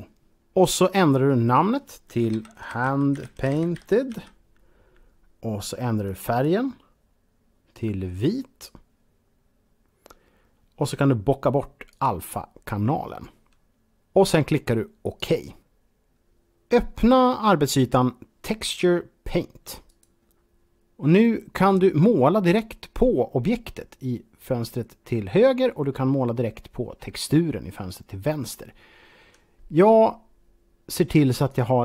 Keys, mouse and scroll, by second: 1.3 click, 2.0-3.9 typing, 5.9 click, 6.3 click, 7.6 click, 11.7 click, 13.7 click, 14.9 click, 19.5 click, 31.0 click.